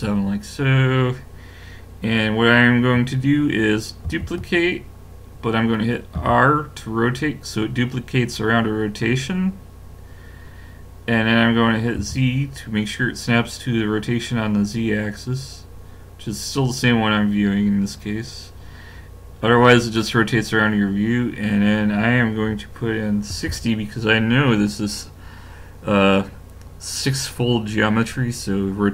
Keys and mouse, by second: 4.1 shift+d.